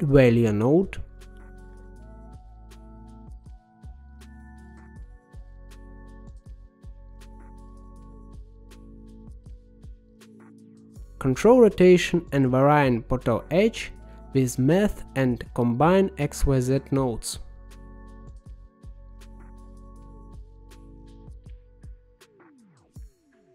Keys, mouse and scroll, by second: 0.2 shift+a, 5.7-7.6 drag, 8.2-11.9 middle drag, 11.9 shift+a, 19.3-20.5 drag, 20.8-22.1 drag, 22.8 middle click, 23.3-23.5 scroll down 2.